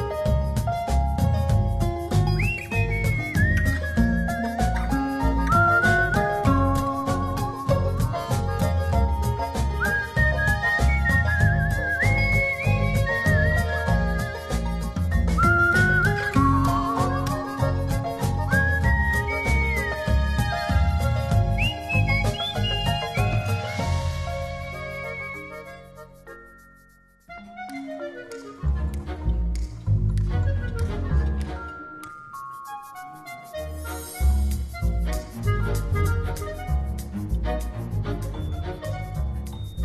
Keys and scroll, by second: 24.7 alt+[, 35.9 space.